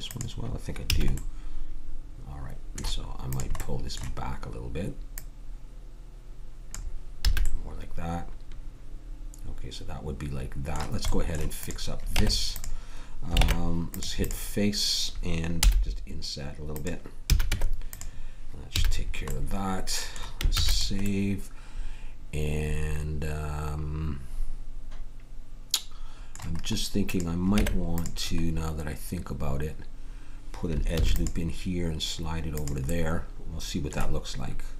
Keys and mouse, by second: 0.9 a, 7.2 a, 11.1-12.6 drag, 12.1 Tab, 13.4 ctrl+Tab, 15.6 i, 17.2 a, 17.4 Tab, 18.7 a, 21.1 ctrl+s, 27.1 right click, 27.6 Tab, 31.0 ctrl+r.